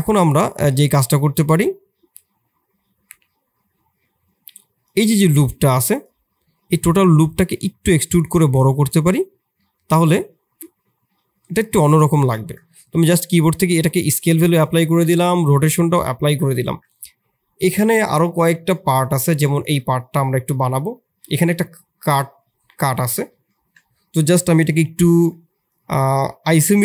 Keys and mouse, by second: 0.1-0.5 middle drag, 0.7 Tab, 1.5-2.8 middle drag, 4.8 click, 5.5 3, 7.3 e, 9.6-11.8 drag, 12.1 Tab, 12.7 ctrl+a, 14.7 ctrl+a, 15.9 middle drag, 16.2 Tab, 16.6 Tab.